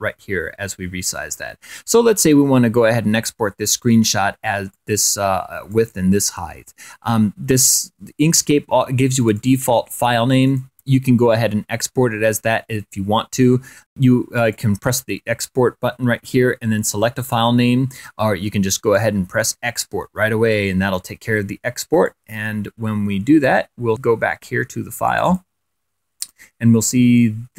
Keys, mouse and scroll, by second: 0.1 click, 5.9 click, 6.3-6.8 scroll up 1, 6.8 click, 10.3 click, 10.7-11.0 scroll up 1, 11.5 click, 16.0 click, 18.7 click, 20.3 click, 23.5 click, 23.9-25.1 drag, 25.7-27.4 drag.